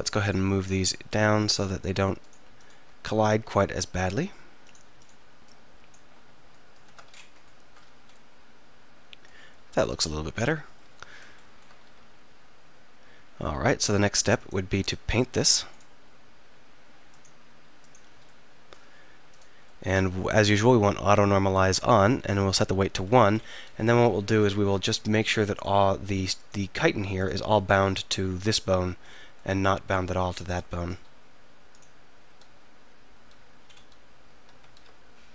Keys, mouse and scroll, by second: 6.9 Tab, 8.4 middle click, 8.6 middle click, 8.7-9.9 middle drag, 10.7 KP_3, 11.9 r, 18.3 middle click, 18.5 middle click, 19.3-21.3 middle drag, 23.7 z, 25.6-29.1 drag, 31.8-33.8 drag, 32.5 z, 33.3 z, 34.8 ctrl+z.